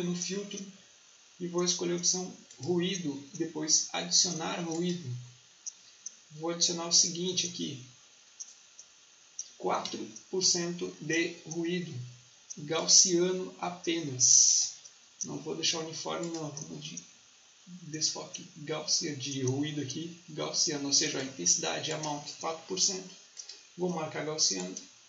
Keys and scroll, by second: 9.7 4.